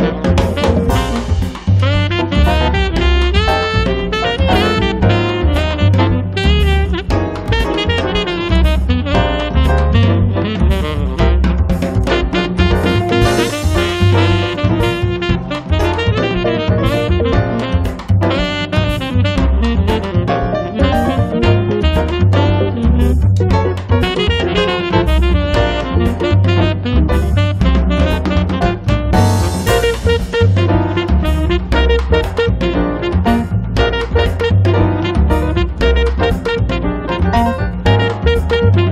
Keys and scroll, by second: 0.1 space, 5.2 space, 7.4 space, 17.3 1, 17.8 0, 18.8 space, 20.7 Escape, 21.2 space, 31.8 Escape, 32.2 space, 36.8 space, 38.8 space.